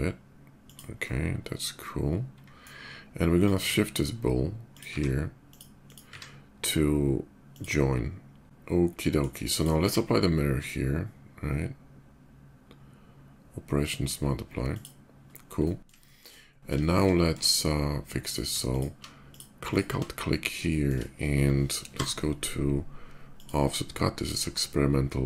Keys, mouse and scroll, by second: 0.4 click, 0.8-2.4 middle drag, 2.9 click, 3.5 q, 4.3 click, 5.1 click, 5.6 click, 7.1 click, 8.4 shift+middle click, 8.7 shift+middle click, 8.8 shift+click, 9.3 shift+click, 9.5 q, 14.4 click, 15.2-15.6 middle drag, 15.8 shift+middle click, 16.1 shift+middle click, 17.0 Tab, 18.0 click, 18.3 alt+click, 19.0 alt+click, 19.4 alt+click, 20.4 shift+middle click, 21.6 y, 23.0 click.